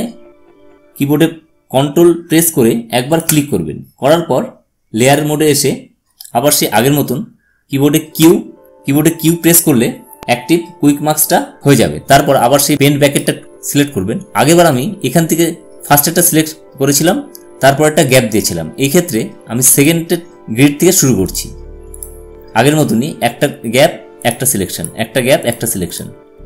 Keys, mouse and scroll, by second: 7.9 q, 12.8-15.0 drag, 19.5 click.